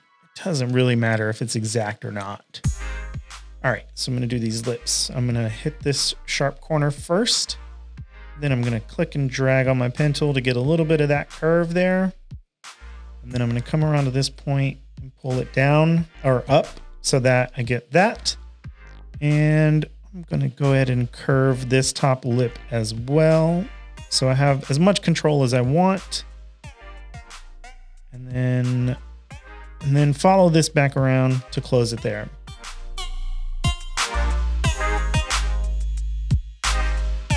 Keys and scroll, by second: 0.5 shift+super+a, 0.7-4.4 typing, 17.3 shift+super+a, 31.2 shift+super+a, 31.5 v, 31.6 space, 32.1 space, 32.5 p, 33.7 space, 33.9 space, 34.5 space.